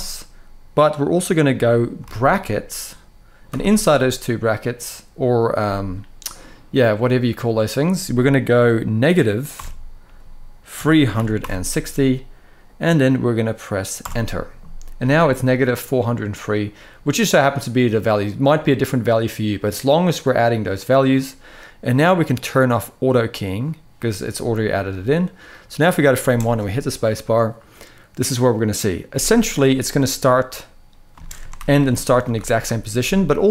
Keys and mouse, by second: 22.8 click, 24.6-25.8 drag, 26.0 space, 30.8 space, 31.3 shift+Left, 31.7 shift+Right, 32.1 shift+Left.